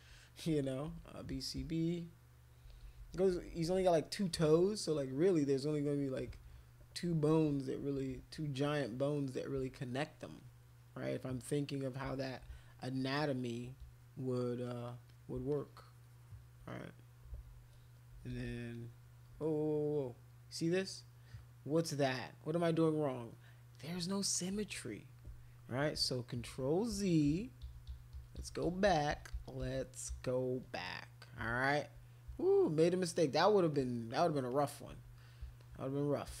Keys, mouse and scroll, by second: 0.6-3.7 typing, 5.4 click, 6.3 x, 7.9 ctrl+z, 8.6 click, 9.1 click, 10.3 click, 10.7 click, 11.0 click, 11.6 click, 12.5 space, 12.7 click, 14.3 alt+click, 14.7 alt+click, 14.8 alt+click, 15.1 alt+click, 15.5 shift+click, 15.7 shift+click, 16.7 click, 17.3 ctrl+z, 18.1 [, 18.3 [, 18.5 [, 18.7 click, 19.4 click, 26.5 ctrl+z, 26.9 ctrl+z, 27.3 ctrl+z, 27.6 ctrl+z, 27.9 ctrl+z, 28.1 ctrl+z, 28.4 ctrl+z, 28.6 ctrl+z, 28.8 ctrl+z, 29.1 ctrl+z, 29.3 ctrl+z, 29.6 ctrl+z, 30.1 ctrl+z, 30.8 click, 33.7 alt+click, 34.5 click, 35.6 alt+click.